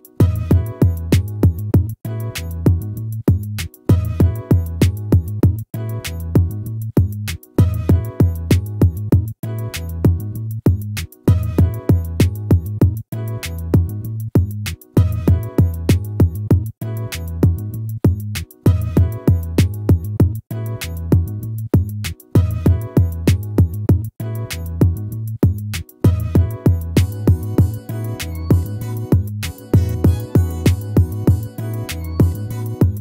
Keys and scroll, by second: 1.5 ctrl+-, 16.3 ctrl+-, 19.0 ctrl++, 26.3 ctrl+z, 28.4 ctrl+-, 31.9 ctrl+-.